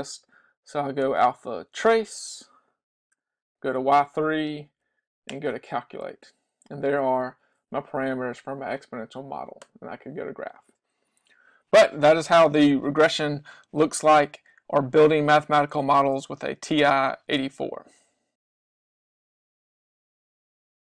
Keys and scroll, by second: 3.2 3, 4.8 Down, 5.4 Return.